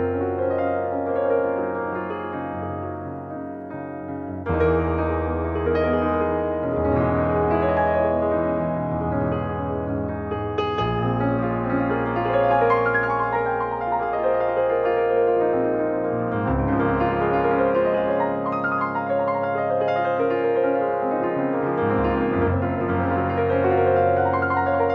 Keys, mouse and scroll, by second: 0.0-2.2 middle drag, 2.2 ctrl+Tab, 4.5-5.7 middle drag, 5.7-6.2 scroll down 2, 6.5-8.0 drag, 8.0-9.8 middle drag, 9.8-10.2 scroll down 1, 10.2 click, 11.4-12.6 drag, 12.6-14.1 middle drag, 14.1-14.4 scroll up 1, 14.4-16.9 shift+middle drag, 16.9 click, 17.2-18.2 scroll up 1, 18.2 click, 19.3 click, 20.1-22.4 middle drag, 22.4 click, 24.5 click.